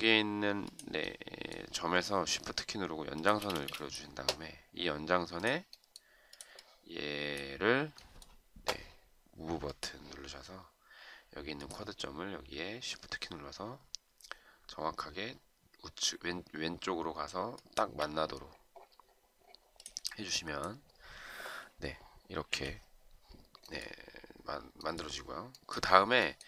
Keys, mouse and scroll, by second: 3.2 shift+click, 3.5 space, 17.7 shift+click, 22.6 Delete.